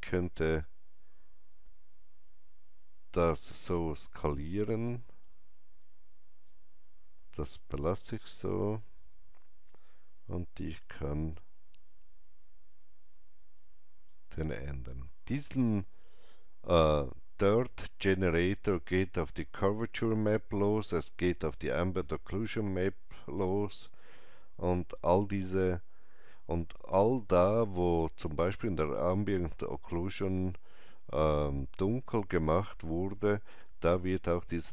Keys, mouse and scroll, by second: 8.1 scroll down 1, 10.9-16.4 drag, 10.9 scroll down 1, 18.1 click, 18.1 scroll down 1.